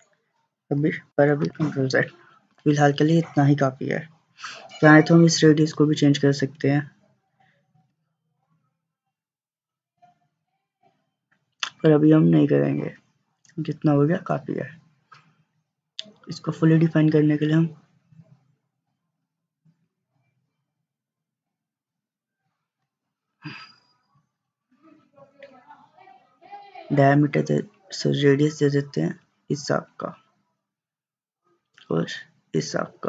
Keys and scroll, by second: 1.4 ctrl+z, 7.9 3, 22.9 Escape.